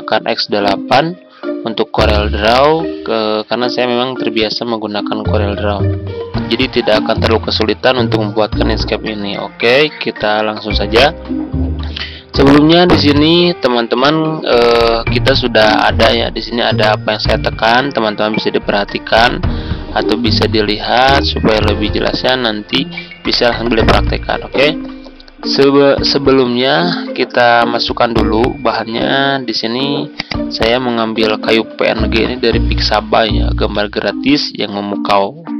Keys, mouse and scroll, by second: 13.5 F4, 14.6-35.5 drag.